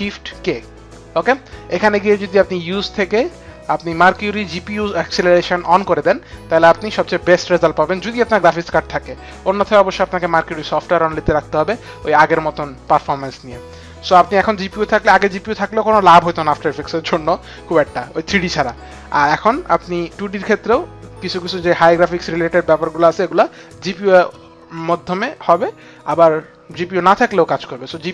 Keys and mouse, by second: 11.2 click.